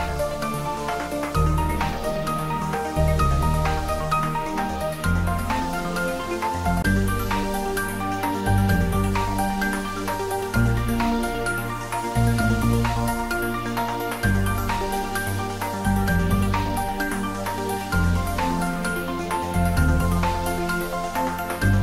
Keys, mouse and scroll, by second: 2.1 click, 2.7 scroll down 1, 8.9 click, 9.3 Tab, 10.2-10.8 drag, 12.1 g, 14.2 ctrl+z, 15.0 shift+z, 15.7 click, 16.4 ctrl+z, 17.3 shift+z, 18.1-20.9 drag.